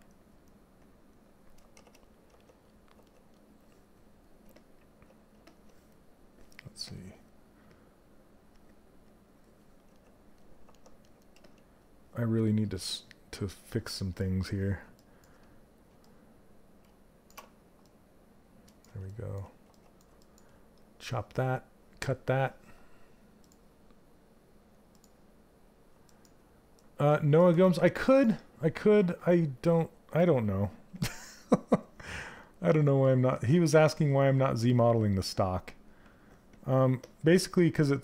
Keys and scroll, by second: 1.3 shift+f, 10.9 s, 16.8 ctrl+shift+space, 30.5 s.